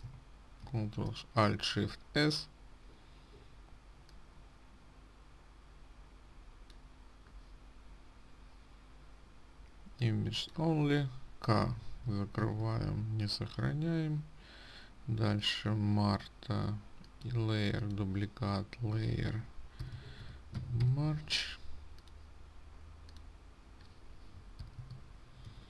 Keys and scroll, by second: 1.2 ctrl+alt+shift+s, 12.9 ctrl+w.